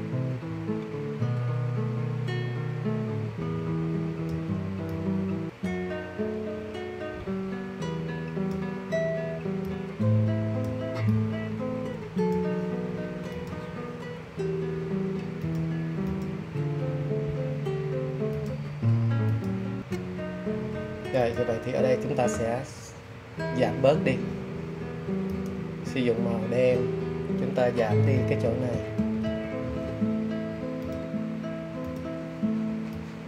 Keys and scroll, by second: 28.0 super+], 28.3 super+], 28.6 super+], 28.9 super+].